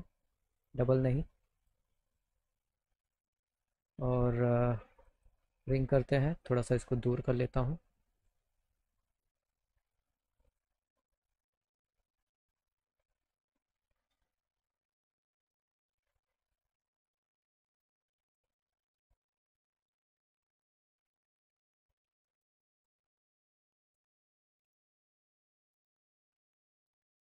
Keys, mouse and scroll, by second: 0.6 right click, 1.6 click, 2.3 middle click, 3.1 middle click, 5.0 click, 5.2 click, 6.4 click, 8.8 click, 10.3 click, 10.5 click, 12.7 alt+middle click, 14.0 alt+middle click, 14.9 click, 15.7 click, 16.9-18.3 drag, 18.5 middle click, 19.0 middle click, 20.4 middle click, 23.0 click, 24.5 click, 25.5 click.